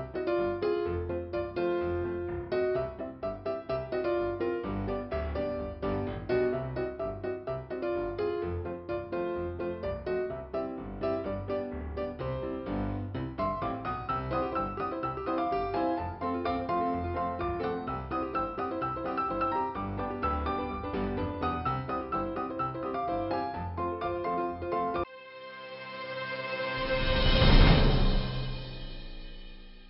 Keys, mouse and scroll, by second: 0.1 scroll up 2, 1.9 scroll up 1, 3.0 click, 8.4 click, 11.4 click, 14.1 click, 16.8 scroll down 2, 18.5 click, 19.5 click.